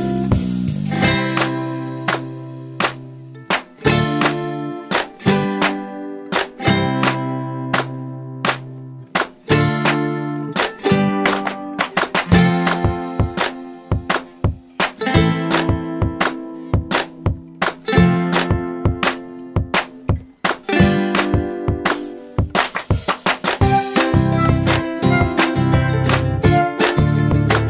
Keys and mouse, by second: 6.7 click, 12.5 click, 14.6 m, 16.2 click, 19.1 click, 25.1 click, 26.5 click.